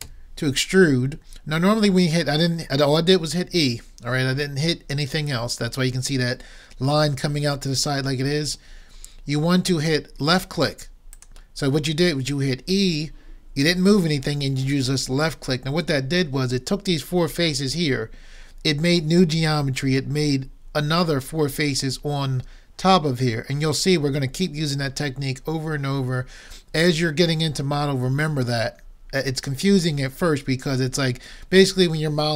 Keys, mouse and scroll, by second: 0.0 e.